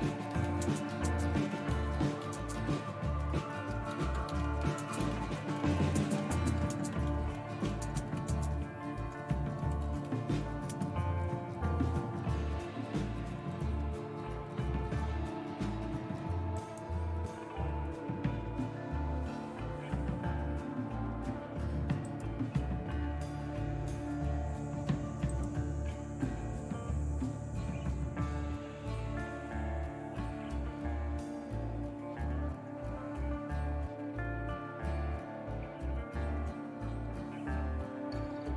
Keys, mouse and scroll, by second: 0.0-11.2 typing, 32.6 super+1, 34.5 super+Return, 35.1 super+Return, 35.8 super+Return.